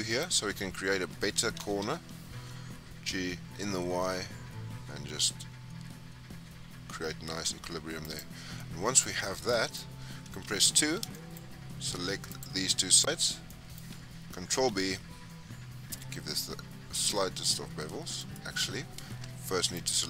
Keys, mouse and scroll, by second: 0.1-1.5 scroll up 4, 1.5 g, 8.3 scroll down 5, 8.5 middle click, 9.2 scroll down 3, 9.4 middle click, 10.3 2, 10.7-12.2 scroll up 13, 11.0 shift+middle click, 12.2 click, 12.9 shift+click, 13.2-13.5 scroll down 4, 13.5-14.6 middle drag, 14.6 ctrl+b, 18.6-19.0 scroll down 3, 19.8 alt+click.